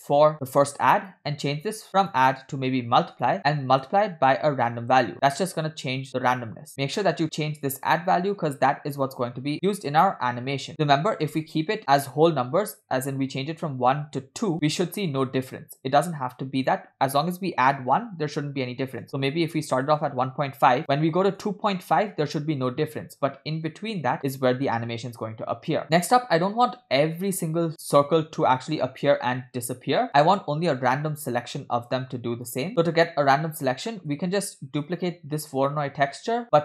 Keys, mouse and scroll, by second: 0.3 ctrl+z, 0.3-1.2 drag, 1.5 scroll up 2, 2.0-3.4 drag, 3.8-6.4 drag, 6.7-11.6 shift+drag, 13.9 click, 16.6-19.9 drag, 20.8-22.1 drag, 23.5-25.8 shift+drag, 28.8-32.5 shift+drag, 32.7 middle click, 32.7 scroll down 3, 33.8 scroll down 1, 33.9 middle click, 34.4 scroll up 3, 34.9 click.